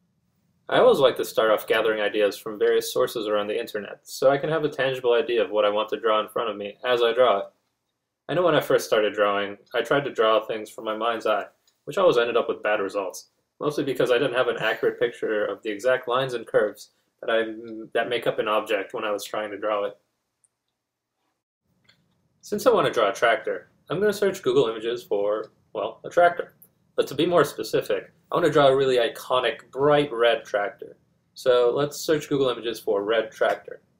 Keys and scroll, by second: 25.3-27.5 typing, 28.6-31.0 typing.